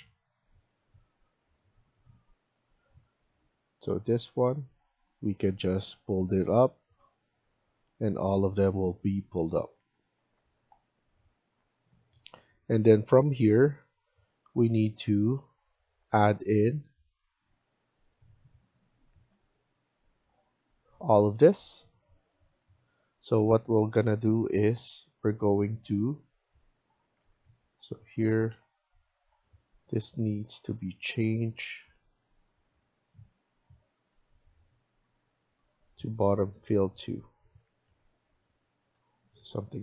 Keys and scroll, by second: 9.4 Escape, 9.6 Escape, 16.6 Escape, 19.0 Escape, 27.0 Escape, 27.4 Escape, 37.4 Escape, 37.6 Escape.